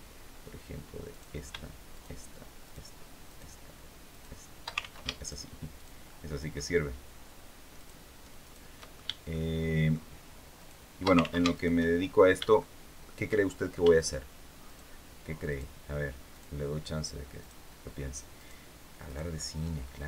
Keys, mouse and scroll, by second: 0.8 right click, 1.6 shift+right click, 2.3 shift+right click, 2.9 shift+right click, 3.8 shift+right click, 4.5 ctrl+shift+z, 4.9 ctrl+shift+right click, 5.4 shift+right click, 5.7 shift+middle click, 7.4 shift+right click, 8.1 shift+right click, 8.5 shift+middle click, 9.0 shift+middle click, 10.2 shift+right click, 10.9 ctrl+shift+z, 11.2 ctrl+shift+right click, 11.6 ctrl+shift+middle click, 12.3-13.6 shift+middle drag, 14.3 shift+right click, 15.2 shift+right click, 16.0 shift+right click, 17.1 shift+right click, 18.0 shift+right click, 18.7 shift+right click, 19.1 shift+middle click.